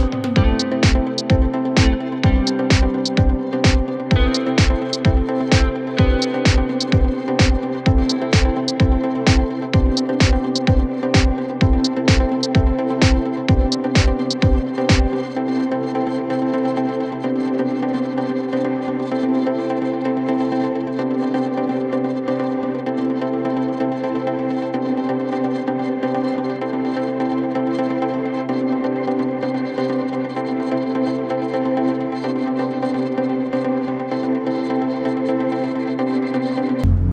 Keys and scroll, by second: 12.7 Escape, 16.6 Escape, 19.7 Escape, 21.9 Escape, 24.3 Escape, 27.0 F3, 27.3 Escape, 28.0 shift+F2, 28.4 Escape, 29.1 F9.